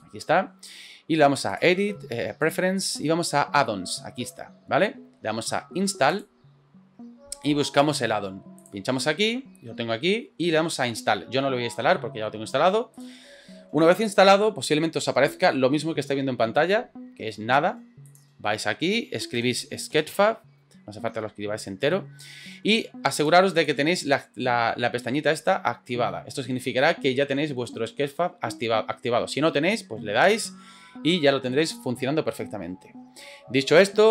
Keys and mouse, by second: 1.6-2.6 drag.